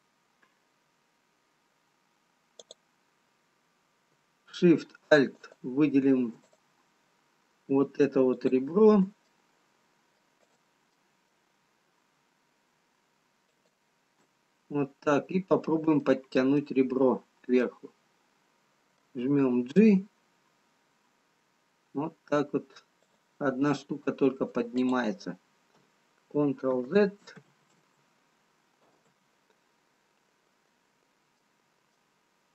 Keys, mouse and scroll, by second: 2.6 click, 5.4 alt+shift+click, 6.6 click, 7.1 scroll up 6, 7.7 click, 10.6 middle click, 10.6 click, 11.4 middle click, 12.3-12.6 scroll up 4, 13.5 alt+shift+click, 14.9-15.7 scroll down 4, 15.7-16.7 scroll down 3, 16.7 middle click, 16.7-17.8 scroll down 1, 17.8 middle click, 17.8 scroll down 1, 20.1 g, 25.0 middle click, 25.0 click, 27.2 ctrl+z, 27.7 ctrl+z, 30.3-31.9 scroll down 2, 31.9 middle click, 31.9-32.5 scroll down 1.